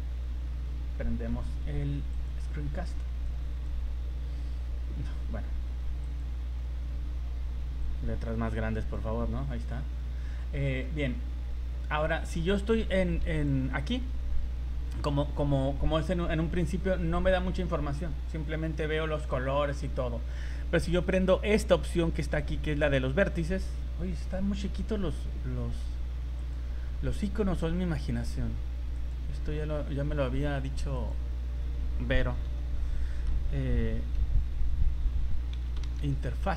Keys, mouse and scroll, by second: 3.2 click, 6.0 click, 6.6-7.8 scroll down 9, 7.8 click, 10.8 scroll down 3, 11.4 scroll up 3, 12.0 right click, 13.3 click, 19.3 middle click, 26.4 click.